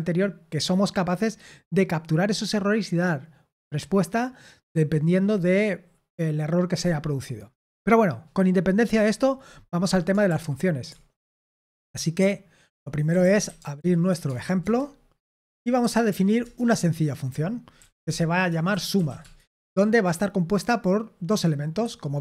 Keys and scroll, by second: 10.2 super+l, 11.2 super+l, 12.8-14.5 typing, 14.6 Return, 15.8-19.4 typing, 21.8-22.2 typing.